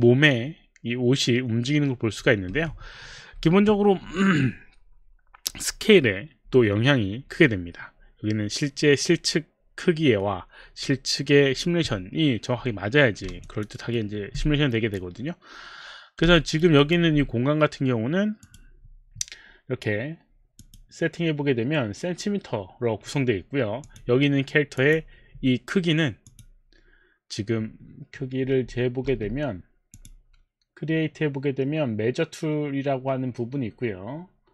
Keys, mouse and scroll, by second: 2.5 Escape, 13.4 alt+click, 13.7 alt+right click, 14.3 alt+click, 16.4 alt+right click, 16.9 alt+click, 18.5 click, 20.6 click, 23.9 click, 24.8 click, 26.3 click, 29.1 space, 30.0 space.